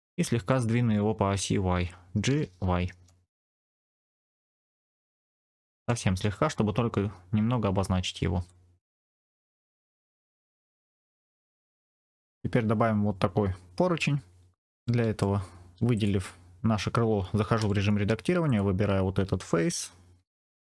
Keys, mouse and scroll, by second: 0.4 scroll up 1, 0.4 middle click, 2.2 g, 2.6 y, 5.4 click, 8.3 Tab, 9.0 middle click, 10.0-10.7 scroll down 2, 10.8-12.2 middle drag, 14.5 middle click, 14.6 scroll up 2, 14.7 middle click, 15.8 click, 17.5 Tab, 18.3 click, 20.1 3, 20.3 click.